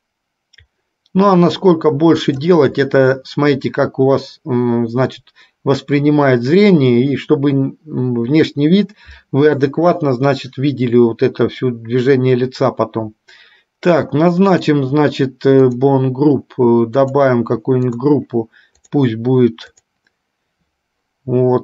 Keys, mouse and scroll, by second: 15.7 click, 17.0 click, 18.0-19.2 drag, 20.0 click.